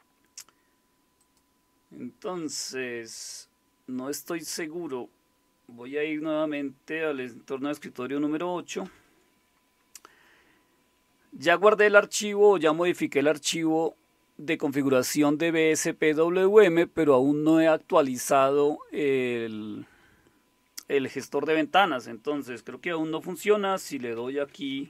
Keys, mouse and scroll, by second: 1.2 click, 8.8 super+8, 24.2 alt+super+d.